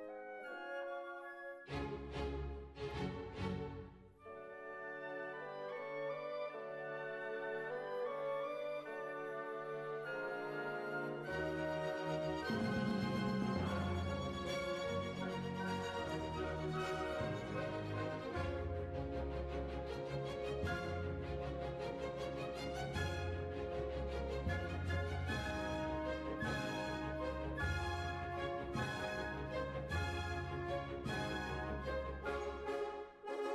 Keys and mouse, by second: 0.0 i, 2.2-3.6 middle drag, 3.6 click, 4.0-6.6 right drag, 5.4 g, 6.8-9.1 middle drag, 9.1 right click, 9.2 g, 9.3 middle click, 10.3 right click, 11.1-12.1 middle drag, 12.1 right click, 12.9 ctrl+l, 13.5 KP_1, 14.6-15.9 drag, 15.9-18.9 middle drag, 18.9-20.0 right drag, 23.5-24.6 middle drag, 24.6-25.7 right drag, 27.9 right click, 28.7-30.0 middle drag, 30.0-31.3 drag, 30.3-32.0 right drag, 32.0 middle click, 33.0 click.